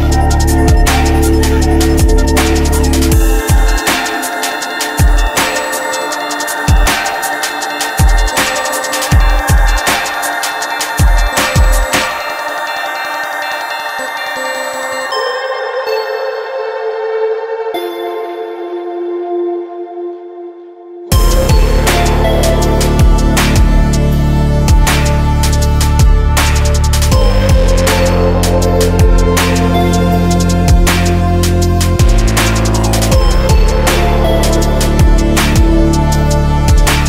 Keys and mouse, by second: 1.6-7.4 drag, 7.4-9.0 right drag, 9.4-11.1 right drag, 11.6-14.7 drag, 14.9-18.1 drag, 18.2-19.2 drag, 20.2-22.1 drag, 24.5-26.7 drag, 30.0-32.6 drag, 32.6-36.6 right drag, 36.6-37.0 drag.